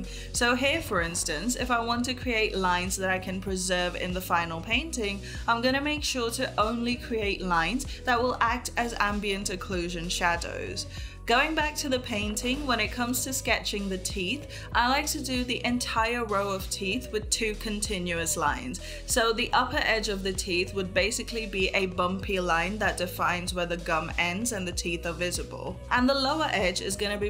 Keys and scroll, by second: 1.5 ], 3.4 ctrl+z, 7.5 ctrl+z, 8.2 space, 10.0 ctrl+z, 10.4 ].